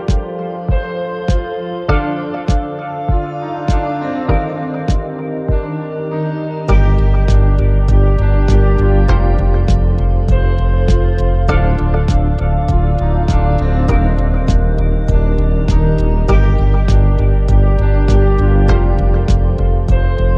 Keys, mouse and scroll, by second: 0.3 Tab, 0.6 Tab, 3.8 Tab, 6.1 click, 11.1-15.5 drag.